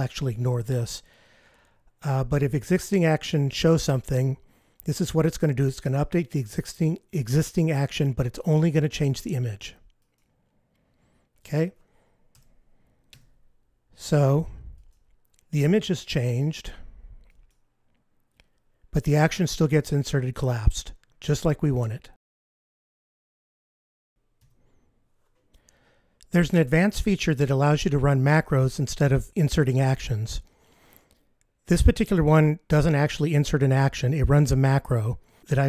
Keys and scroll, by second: 13.1 F15, 24.5 F15.